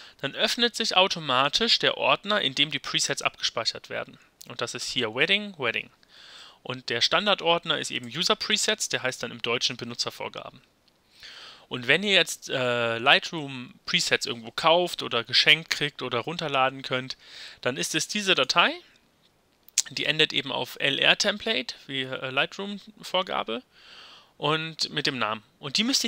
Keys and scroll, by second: 6.4 Left.